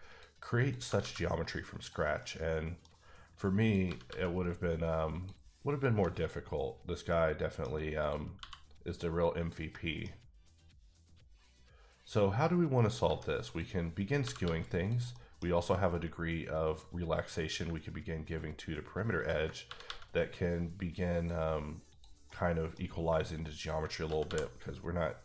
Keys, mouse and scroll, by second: 0.1 click, 0.6 click, 0.7 g, 0.9 g, 1.7 click, 2.2 middle click, 3.6 click, 3.8 g, 4.1 g, 5.1 click, 5.7 click, 5.9 g, 6.1 click, 7.1 middle click, 8.0 click, 8.4 f, 9.4 click, 9.7 middle click, 13.0 g, 13.4 click, 14.1 click, 14.2 g, 14.4 g, 14.7 click, 15.1 middle click, 16.6 click, 17.7 ctrl+click, 19.6 ctrl+g, 21.1 click, 21.9 click, 22.3 middle click, 23.5 ctrl+click, 24.0 g, 24.2 g.